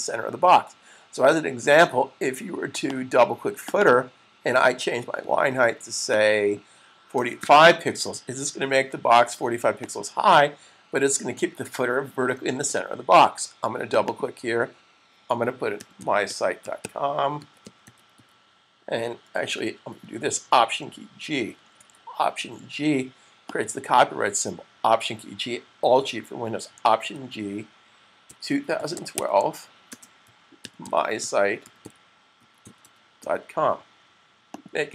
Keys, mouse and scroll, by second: 2.7 click, 3.7 double click, 5.8 click, 7.0-7.8 typing, 9.5 click, 11.9 super+s, 13.8 click, 14.1 double click, 15.1-17.9 typing, 19.3-20.8 typing, 21.7 super+z, 23.3 double click, 26.9 alt+g, 28.3-33.2 typing, 34.5 click.